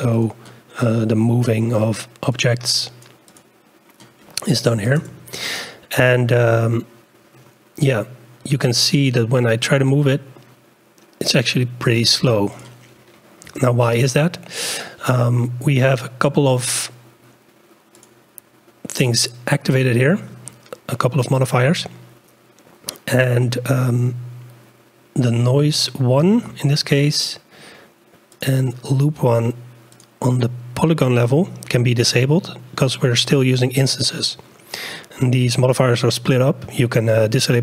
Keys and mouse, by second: 0.1 click, 2.7-5.4 drag, 9.3-12.5 drag, 12.5-14.0 drag, 18.0 click, 25.8-27.5 drag, 28.4-30.3 drag.